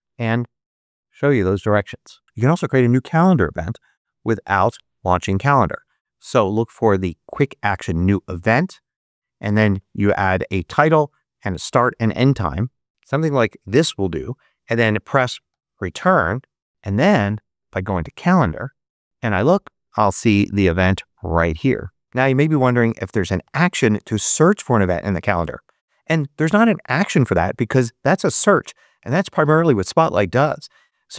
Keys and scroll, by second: 3.1-5.0 typing, 8.0 Return, 12.9 m, 15.4 Return.